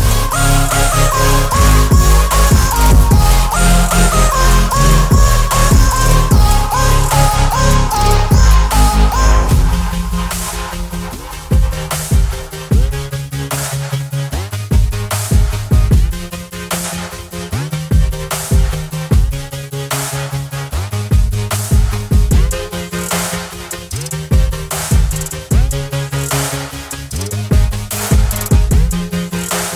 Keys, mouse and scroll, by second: 1.4-4.5 alt+scroll down 1, 5.1 alt+Num_Lock, 5.1 alt+scroll down 1, 5.2-6.7 alt+drag, 7.9-10.4 alt+scroll up 1, 12.6-13.2 alt+scroll down 1, 14.0 alt+scroll down 1, 14.0 alt+click, 14.6-16.4 alt+scroll up 1, 16.6-18.1 alt+drag, 22.1 ctrl+alt+t.